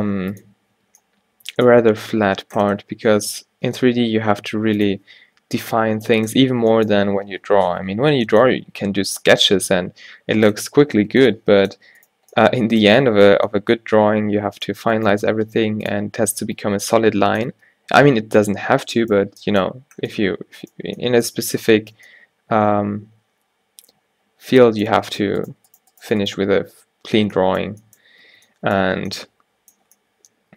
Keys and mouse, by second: 0.9 Tab, 3.4 z, 4.3-5.7 middle drag, 5.9 z, 7.2 Tab, 8.1 z, 10.1 a, 10.7 z, 12.1-13.8 drag, 15.0-17.4 drag, 15.3 g, 16.2 Tab, 17.6 Tab, 25.2 right click, 27.2 f, 28.3 ctrl+z, 28.9 a.